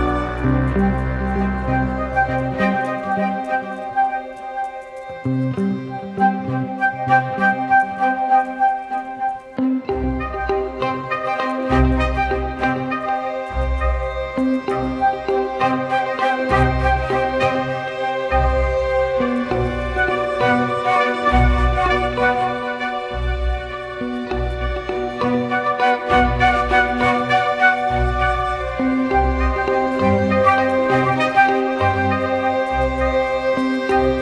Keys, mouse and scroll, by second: 0.0 double click, 10.4 double click, 16.1 e.